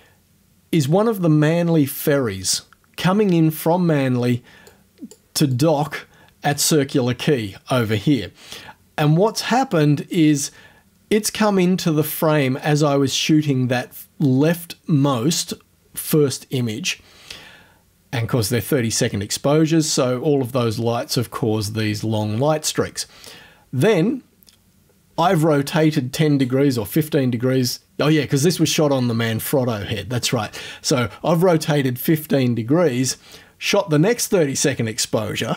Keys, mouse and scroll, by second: 4.7 click, 5.6 click, 9.0 click, 9.8 click.